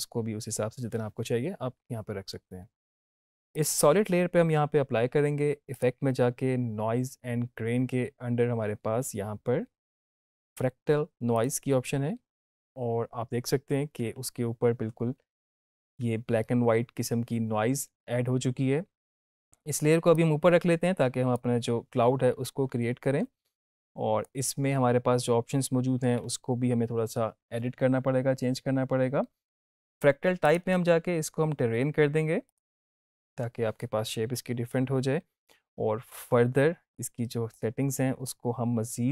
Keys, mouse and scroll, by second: 5.7 click, 11.3 click, 20.1-21.3 drag, 23.5-24.4 drag, 30.4 click, 37.4-38.4 drag.